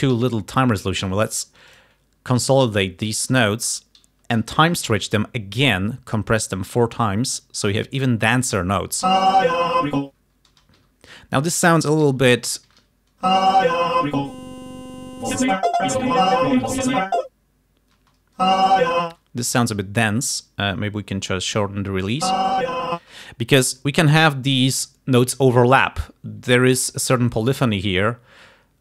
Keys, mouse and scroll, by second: 0.3 r, 0.7 click, 1.8 right click, 2.9 click, 4.5 t, 5.1-7.0 drag, 9.2 space, 10.7 space, 10.9 g, 11.5 click, 12.1 alt+d, 13.4 alt+space, 14.2 click, 18.1 space, 19.2 space, 20.4-21.5 drag, 22.4 space, 23.2 space, 23.9-24.9 drag.